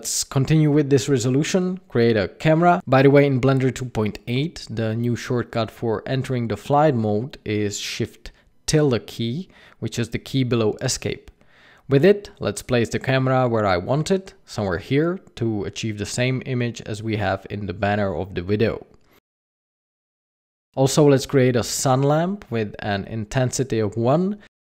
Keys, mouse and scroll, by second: 0.3 shift+a, 3.8 KP_0, 5.1 shift+`, 12.4 click, 13.4 click, 15.0 click, 16.2 scroll up 4, 16.6 scroll down 1, 18.3 click, 20.7 click, 21.0 scroll down 1, 21.2 middle click, 21.6 scroll up 5, 22.1 shift+a, 23.6 g, 24.2 r.